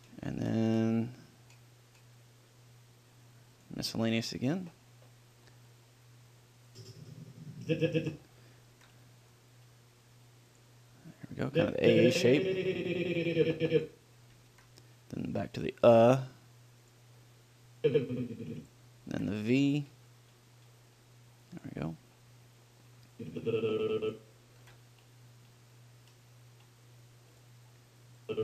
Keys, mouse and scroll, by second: 0.2 ctrl+l, 0.4-3.8 middle drag, 6.1 middle click, 7.0-8.7 drag, 9.0 ctrl+l, 11.8-13.5 drag, 14.8 ctrl+l, 18.1-19.6 drag, 19.4 ctrl+l, 22.6 middle click, 23.4-25.3 drag, 24.9 ctrl+l.